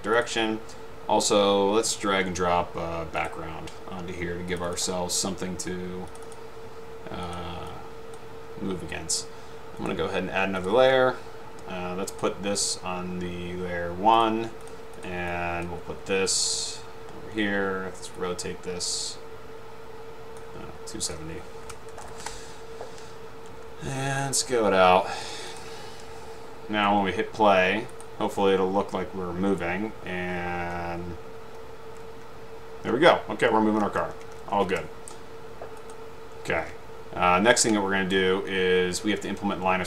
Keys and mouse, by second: 4.7 click, 6.2 click, 6.4 click, 7.4 click, 7.8 click, 10.0 right click, 14.3-14.7 drag, 18.8-21.0 drag, 22.1 0, 22.3 Return, 24.3-25.4 shift+drag, 25.6 click, 28.1-28.7 drag, 30.9 Up, 32.8 Left, 33.2 Right, 33.9 Left, 34.2 Left, 34.5 Left, 34.6 Right, 35.9 click, 38.0 middle click.